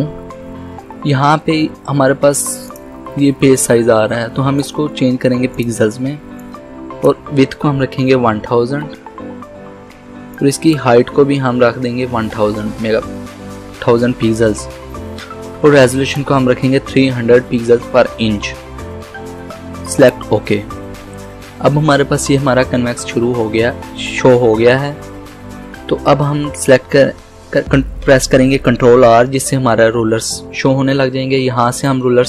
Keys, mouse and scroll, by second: 2.7-7.9 drag, 7.7-9.3 typing, 10.4 click, 11.4-12.6 typing, 15.8-20.0 drag, 28.3 click, 29.1 ctrl+r, 31.9-32.2 drag.